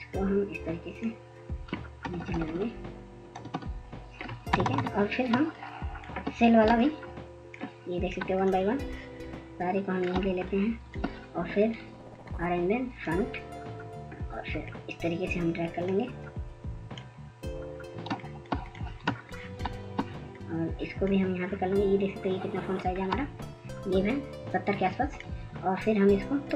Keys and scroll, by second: 5.3 Down, 5.5 Down, 5.8 Down, 5.9-6.6 Down, 6.8 Down, 7.8 ctrl+-, 8.0 ctrl+-, 8.0 ctrl+-, 8.5 ctrl+-.